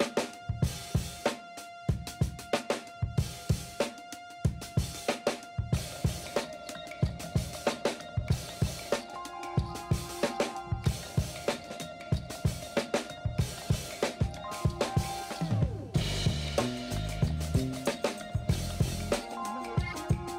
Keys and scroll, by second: 7.5 b, 9.2 ctrl+alt+d, 9.9 ctrl+alt+z, 10.6 ctrl+z, 11.1 ctrl+alt+d, 12.2 ctrl+j, 12.4 v, 13.0 ctrl+alt+z, 15.9 alt+shift+BackSpace, 16.2 v, 16.4 space, 17.5 v, 18.3 ctrl+alt+z, 18.6 s.